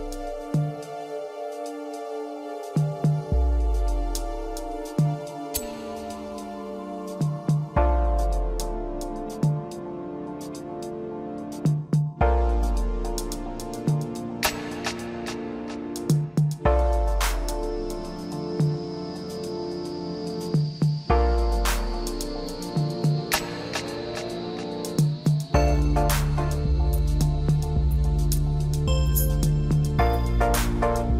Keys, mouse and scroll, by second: 0.9 click, 1.4-1.8 scroll up 1, 2.9 shift+d, 5.1 p, 6.7 Tab, 7.1 click, 9.0 click, 10.0 Tab, 10.7 a, 11.4 s, 16.4 s, 17.9-18.2 scroll up 1, 18.6 g, 20.9 scroll down 1, 21.2-22.6 middle drag, 22.6 e, 24.7 middle click, 25.6 click, 26.6 KP_1, 27.8 e, 29.9-30.4 scroll up 2.